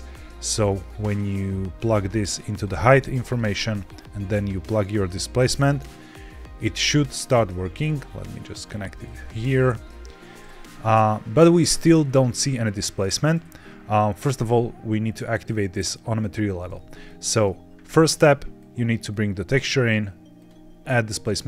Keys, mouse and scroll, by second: 0.6-2.5 drag, 3.2 click, 3.4 middle click, 4.6-5.7 drag, 7.8-8.5 drag, 10.9-12.0 middle drag, 12.0 scroll up 1, 12.9 middle click, 16.5-17.0 scroll down 2, 17.0 middle click, 18.5-19.0 drag, 20.3 click.